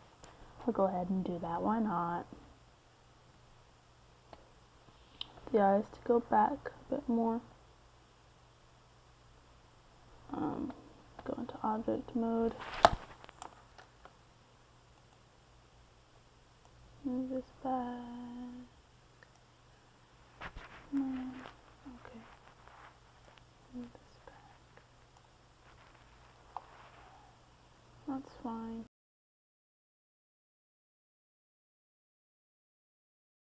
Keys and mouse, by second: 0.2-1.8 middle drag, 1.8 g, 2.7 f, 5.1-6.5 drag, 6.5 middle click, 7.5-9.3 middle drag, 11.1 click, 11.4 typing, 13.2-17.7 middle drag, 17.7-19.2 right drag, 19.2-21.9 drag, 23.7 z, 25.3 KP_3, 27.8-28.9 drag, 29.5 z, 31.2-32.3 middle drag.